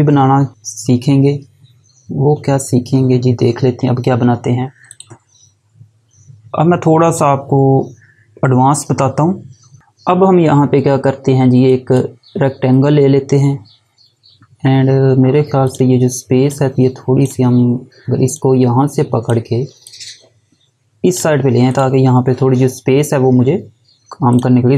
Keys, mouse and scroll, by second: 2.8 scroll up 1, 4.9 click, 9.8 click, 11.5 click, 15.4 click, 24.1 click.